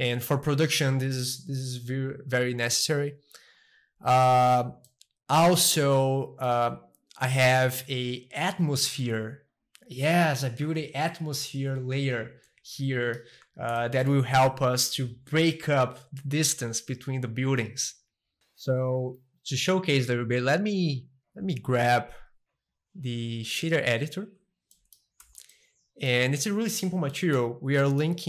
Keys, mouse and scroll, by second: 0.0-2.0 drag, 3.6 click, 4.1-4.9 scroll up 2, 4.9 middle click, 5.7-7.7 shift+middle drag, 8.8-10.8 drag, 12.8 middle click, 13.4 a, 13.8-15.7 shift+middle drag, 18.4-20.2 middle drag, 20.9-23.0 drag, 23.8 click, 24.4-27.3 middle drag, 25.2 n, 27.8-28.2 middle drag.